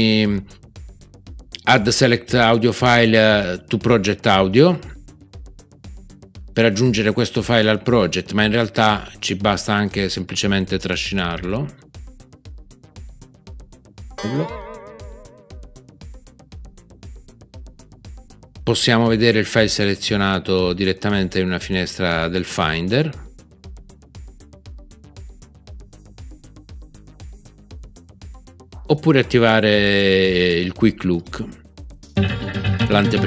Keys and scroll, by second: 14.1 super+z.